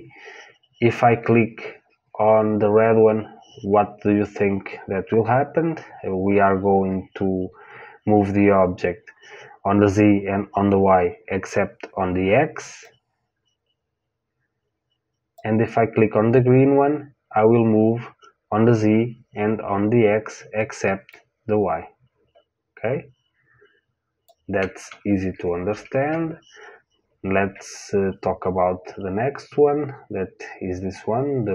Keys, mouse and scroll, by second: 12.8 click, 21.0 click, 25.3 ctrl+z, 25.6 ctrl+z.